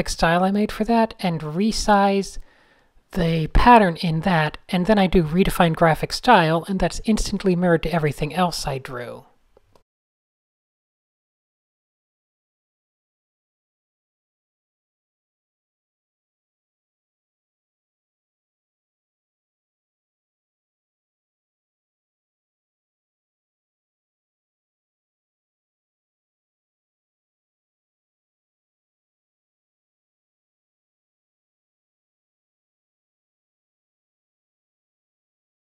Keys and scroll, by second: 3.4 shift+a, 4.1 shift+BackSpace, 4.2 shift+BackSpace, 4.4 super+space, 4.6 super+space, 6.1 super+0, 6.4 Tab, 12.5 Tab, 15.1 super+s, 16.7 super+-, 16.7 super+-, 17.9 alt+super+l, 18.0-19.3 typing, 19.3 Tab, 19.6 Tab, 20.0 Tab, 20.6 typing, 24.2 Tab, 24.9 alt+super+g, 27.5-28.3 typing, 28.4 Tab, 29.0 super+z, 29.4 super+h, 29.5 shift+super+z, 30.0 super+z, 30.5 shift+super+a, 30.6 shift+super+Tab, 30.7 shift+super+a, 30.7 n, 31.4 shift+super+a, 31.4 Tab, 31.4 n, 31.6 super+z, 32.4 Tab, 32.6 super+a, 32.6-34.3 typing, 35.7 shift+super+a.